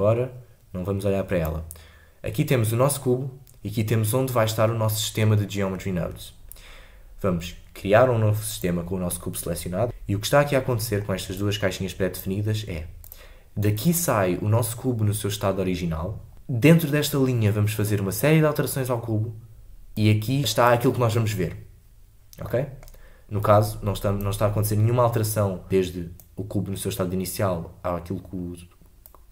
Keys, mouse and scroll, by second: 8.6 click, 10.6-16.3 drag, 16.3 scroll up 3, 22.4-29.3 middle drag.